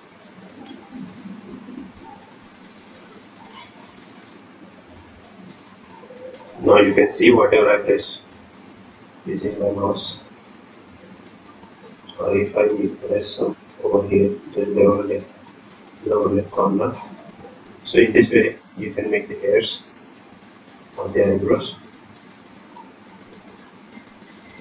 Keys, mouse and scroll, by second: 0.3 scroll up 4, 0.7 middle click, 0.7 scroll down 4, 1.9-3.0 scroll up 7, 2.5 click, 3.0 click, 5.0 click, 6.3 click, 7.8 click, 8.5 click, 10.2 click, 10.8 click, 12.1 click, 13.4-13.9 scroll down 6, 14.6 middle click, 14.6-14.9 scroll up 2, 14.9 middle click, 15.6 middle click, 15.6 scroll down 1, 15.9 middle click, 16.3-16.8 scroll up 7, 16.8 middle click, 17.2-17.6 scroll down 2, 17.5-18.1 scroll up 4, 18.3 click, 18.9 click, 22.0 click, 22.9 click, 23.3 click, 24.3 click.